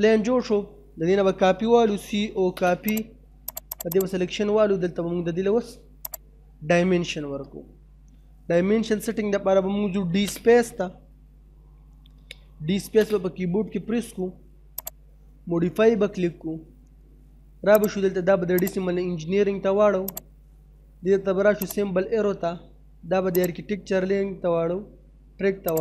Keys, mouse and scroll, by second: 1.5-2.3 typing, 2.9 click, 3.7 right click, 3.9 click, 4.5 middle click, 6.2 click, 7.3 middle click, 9.8 f, 9.9 space, 12.7 space, 14.8 click, 17.8 click.